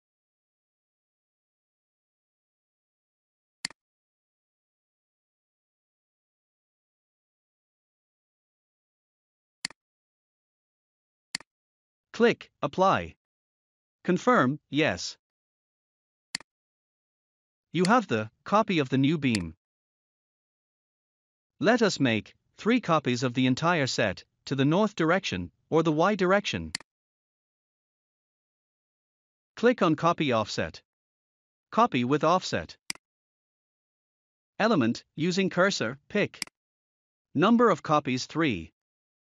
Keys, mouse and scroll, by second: 3.5 click, 7.9 typing, 9.5 click, 11.2 click, 16.2 click, 17.7 click, 19.2 click, 20.0 scroll down 1, 26.6 click, 27.8 scroll down 1, 30.9 scroll up 1, 32.8 click, 34.0 0, 36.3 click, 38.7 3.